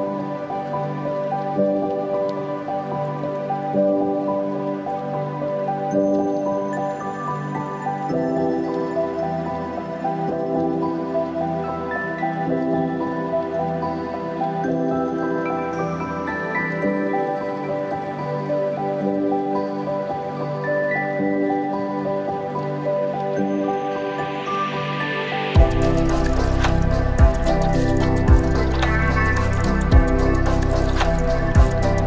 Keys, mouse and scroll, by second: 0.5-0.8 scroll up 1, 0.9 shift+middle click, 3.5 click, 4.5 click, 5.2-6.6 drag, 7.0 middle click, 8.0 click, 8.7-10.6 drag, 10.9 middle click, 12.2 click, 12.8-14.2 drag, 14.5-15.7 middle drag, 16.2 click, 16.7 click, 18.0-19.0 middle drag, 19.6 click, 20.4-22.2 drag, 22.8 click, 23.6 click, 24.4-26.0 drag, 26.4-28.9 middle drag, 28.9 click, 29.5-31.0 drag, 31.3-32.0 middle drag.